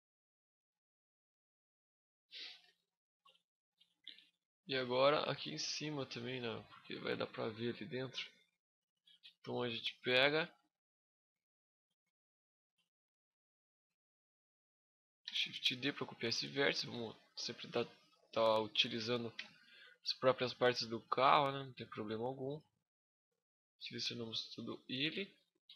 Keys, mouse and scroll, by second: 0.3 a, 0.6 middle click, 1.1 scroll down 1, 1.9 middle click, 1.9 scroll down 7, 2.5 shift+middle click, 3.2 middle click, 3.6 shift+scroll up 1, 3.6 shift+middle click, 4.1 scroll up 2, 4.6 middle click, 5.0 shift+scroll up 1, 5.1 shift+middle click, 5.5 middle click, 6.3 scroll down 1, 6.5 shift+middle click, 7.1 middle click, 7.6 scroll up 4, 8.0 shift+middle click, 9.0 Tab, 9.5 middle click, 10.9 right click, 11.4 right click, 11.6 z, 12.0 right click, 12.5 shift+middle click, 12.5 shift+scroll up 1, 15.0 shift+d, 15.4 right click, 15.7 click, 17.8 click, 19.1 e, 19.4 right click, 19.8 click, 21.0 middle click, 21.3 z, 23.8 alt+right click, 24.3 alt+right click, 25.0 middle click, 25.6 KP_1.